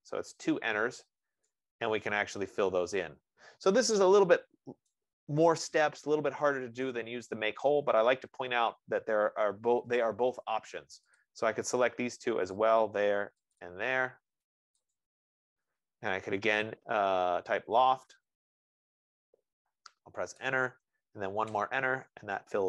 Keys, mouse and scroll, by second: 1.2-1.6 scroll, 5.3 right click, 5.8-6.2 scroll, 8.2-9.6 scroll, 11.6 click, 13.0 click, 13.8 click, 15.2 click, 22.0 Return, 22.0 typing.